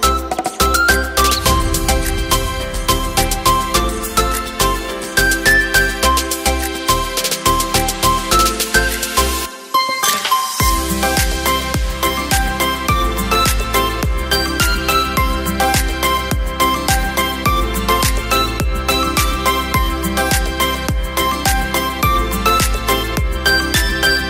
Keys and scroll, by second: 14.0 Return, 17.4 e, 20.7 v.